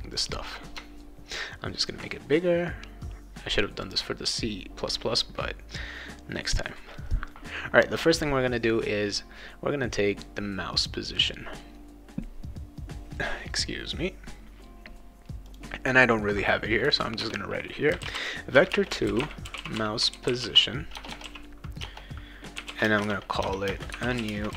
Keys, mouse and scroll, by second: 0.1 click, 3.8 click, 15.4 click, 17.2 Return, 17.7-24.5 typing.